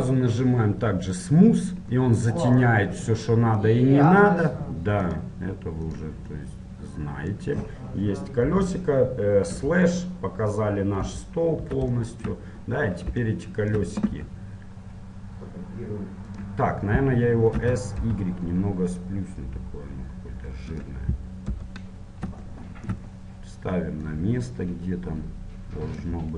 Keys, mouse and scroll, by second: 1.4-3.1 drag, 3.1-4.3 middle drag, 6.1-8.7 drag, 8.7 KP_7, 9.7 KP_Divide, 10.2-15.2 middle drag, 11.2 KP_7, 14.4 g, 16.9-18.9 middle drag, 17.7 s, 21.7 KP_1, 24.2-26.1 drag.